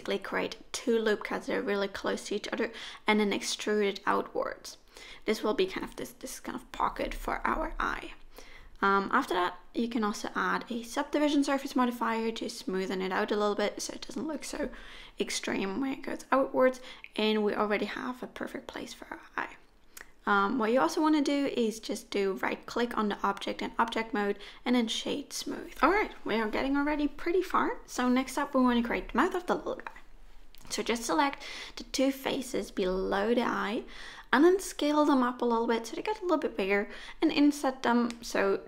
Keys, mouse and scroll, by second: 0.3 middle click, 1.0 e, 3.2 click, 4.5 ctrl+1, 4.5 2, 5.0 click, 5.3 click, 7.2 middle click, 10.8 click, 11.6 middle click, 12.6 Tab, 13.1 middle click, 14.2 right click, 15.8 middle click, 17.2 Tab, 17.7 middle click, 19.0 KP_1, 20.8-22.0 scroll up 1, 22.0 3, 22.5 click, 23.2 shift+click, 24.1-25.0 scroll up 1, 25.0 s, 36.8 middle click, 38.0-38.6 scroll up 1.